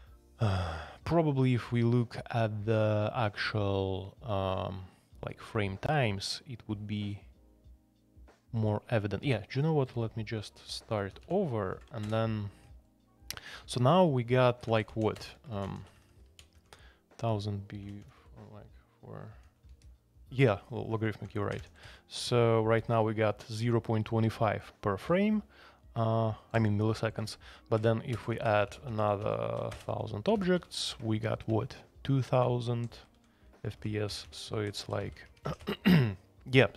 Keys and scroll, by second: 9.2 super+c, 10.5 alt+p, 11.0 alt+p, 11.2 alt+p, 11.7 alt+n, 11.7 alt+space, 12.0 Return, 14.6-20.1 typing, 21.2-22.3 typing, 24.8-25.5 typing, 27.6-30.8 typing, 31.5 Escape, 32.1-36.0 typing.